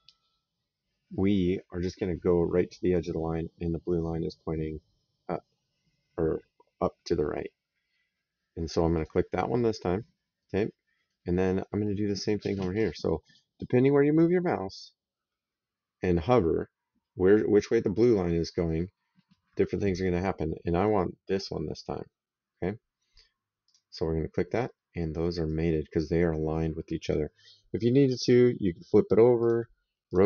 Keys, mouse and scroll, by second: 8.8 click, 10.2 right click, 23.5 click, 25.3 right click, 28.1 click, 29.2 click.